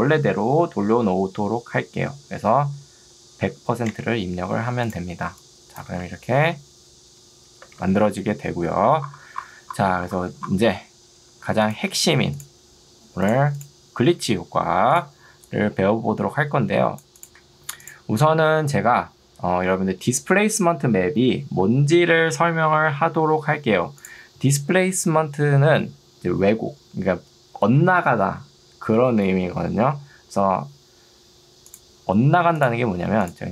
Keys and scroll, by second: 3.4 0, 4.0 Return, 6.0 space.